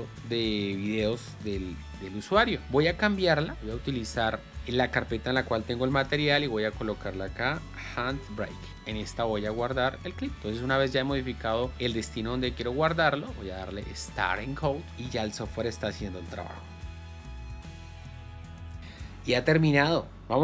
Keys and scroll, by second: 6.3 ctrl+shift+n, 7.9 h, 8.3 b, 8.7 Return.